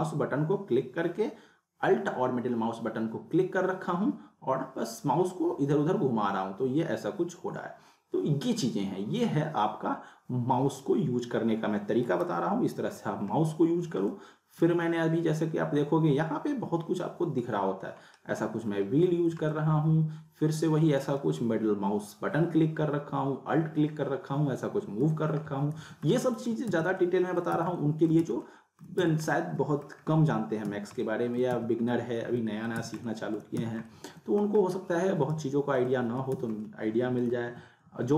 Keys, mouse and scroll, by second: 12.4 scroll down 1, 12.9-13.5 scroll up 1, 14.0 alt+scroll up 1, 14.1-14.7 alt+middle click, 14.9-15.3 scroll down 1, 15.4 scroll up 1, 17.9 scroll up 1, 18.7 scroll down 1, 19.5-21.0 alt+middle drag, 25.3 scroll up 1, 25.8-29.0 typing, 26.1-26.7 alt+middle click, 27.1-27.6 alt+middle click, 27.8 middle click, 28.4-29.0 alt+middle click, 29.3-29.9 alt+middle click, 29.9 scroll down 1, 30.0 scroll up 1, 30.7 z, 31.0-31.6 alt+middle click, 31.6 z, 31.9-32.8 alt+middle click, 32.7 z, 33.1 alt+middle click, 33.6 z, 33.8-34.4 alt+middle click, 34.6-34.9 scroll up 1, 35.4 z, 35.9-36.5 alt+middle click, 36.3 z, 36.7-37.2 alt+middle click, 37.4 w, 38.0 alt+w.